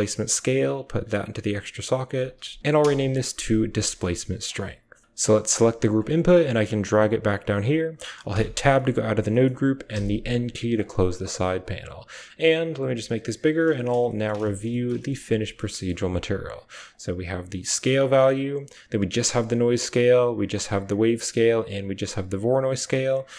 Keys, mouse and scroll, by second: 0.2-1.4 drag, 0.5-3.0 typing, 2.0 click, 4.9 click, 5.2 click, 6.0 click, 6.3 g, 8.2 Tab, 9.8-10.2 typing, 10.8 click, 11.2-12.2 typing, 11.4 click, 12.5 click, 13.5 shift+click, 13.9 ctrl+click, 14.2 shift+middle click, 14.2 typing, 14.5 ctrl+middle drag, 15.2 a, 15.5 shift+right click, 16.8-17.9 drag, 18.5 click, 19.9 click, 21.2 click, 22.6 click.